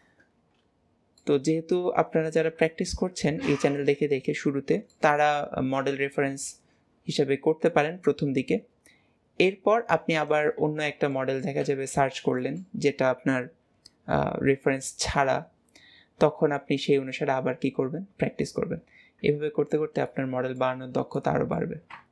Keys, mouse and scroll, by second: 1.3-2.5 middle drag, 2.5 KP_1, 3.9 KP_3, 5.2-6.3 shift+middle drag, 10.7 middle click, 10.8 scroll down 3, 11.7-12.4 middle drag, 15.5-20.3 middle drag, 20.9-21.2 scroll down 2, 21.2-22.1 middle drag.